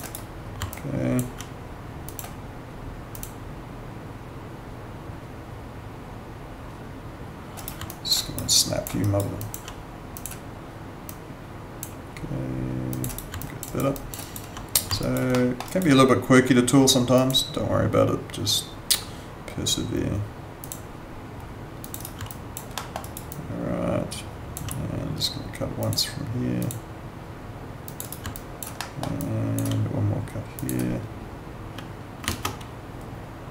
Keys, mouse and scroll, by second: 0.0 right click, 0.7 alt+click, 7.6 right click, 7.8 alt+click, 8.2 alt+right click, 8.5 alt+click, 9.0 alt+right click, 9.4 alt+click, 13.1 right click, 13.4 alt+click, 13.7 alt+right click, 14.0 alt+click, 14.2 alt+right click, 15.0 alt+right click, 15.3 alt+middle click, 15.6 alt+right click, 17.1 click, 20.6 click, 22.0 right click, 22.3 alt+click, 22.7 alt+middle click, 23.0 alt+right click, 23.3 alt+click, 26.6 click, 28.0 right click, 28.3 alt+click, 28.8 alt+middle click, 29.2 alt+click, 32.2 ctrl+z.